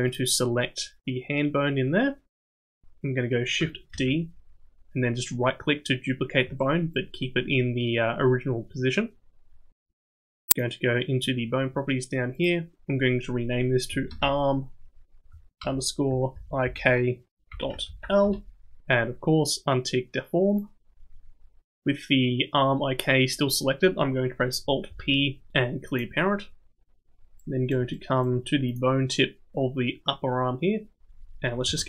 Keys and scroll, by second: 3.9 shift+d, 24.9 alt+p, 31.6 KP_7.